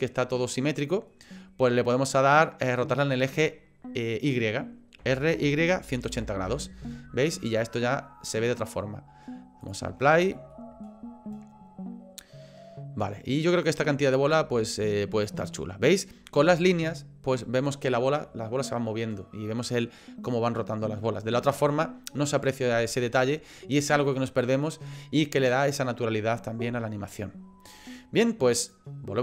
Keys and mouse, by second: 0.5 middle click, 5.0 r, 7.4 click, 7.7 middle click, 9.6 click, 10.1 shift+middle click, 14.7 shift+middle click, 16.5 shift+middle click, 28.7 click.